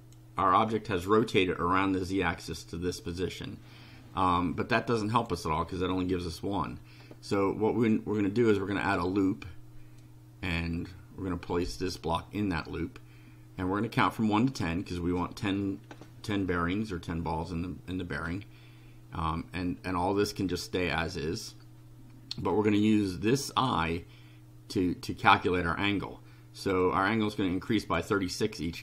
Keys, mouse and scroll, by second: 4.7 click, 8.4 click, 10.0-12.1 drag, 26.8-28.1 drag, 28.7 click.